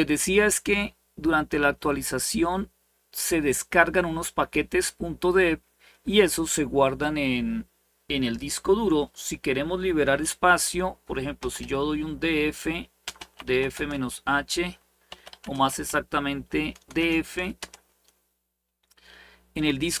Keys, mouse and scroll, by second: 0.0-3.3 scroll up 1, 3.3-3.7 scroll up 1, 4.6-8.2 scroll down 1, 10.9-17.3 typing.